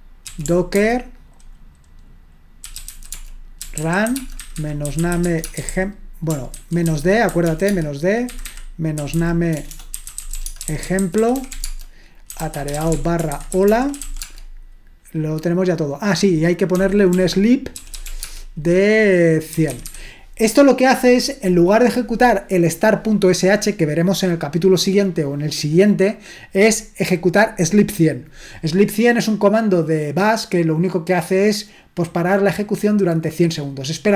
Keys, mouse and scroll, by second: 0.0-0.7 typing, 2.4-14.5 typing, 6.6 ctrl+w, 6.8 ctrl+w, 16.7-20.3 typing.